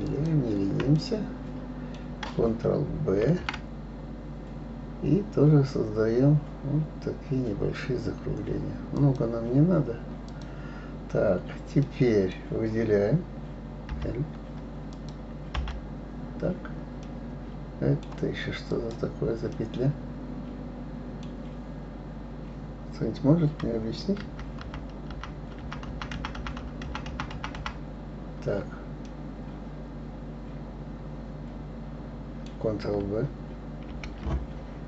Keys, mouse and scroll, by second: 0.0 shift+click, 1.0-3.2 middle drag, 3.2 ctrl+b, 10.3 click, 11.8-13.9 middle drag, 13.9 l, 14.9 click, 15.5 l, 17.0-18.7 middle drag, 18.7 click, 19.5-22.5 middle drag, 24.2 ctrl+z, 24.6 ctrl+z, 25.1 ctrl+z, 25.8 ctrl+z, 25.9 ctrl+z, 26.2 ctrl+z, 26.3 ctrl+z, 26.6 ctrl+z, 26.9 ctrl+z, 27.1 ctrl+z, 27.3 ctrl+z, 27.6 ctrl+z, 29.0-32.0 middle drag, 33.9 ctrl+b.